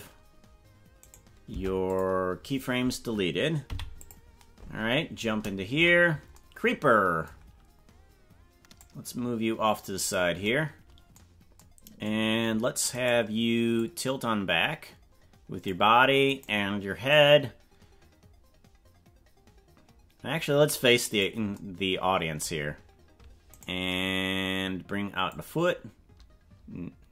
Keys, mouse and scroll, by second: 1.0 right click, 1.5 Delete, 3.6 i, 5.9 KP_Decimal, 8.8-10.1 drag, 13.0 right click, 13.7-15.7 drag, 16.3 right click, 17.1-21.3 drag, 23.6 right click, 25.3-27.1 drag.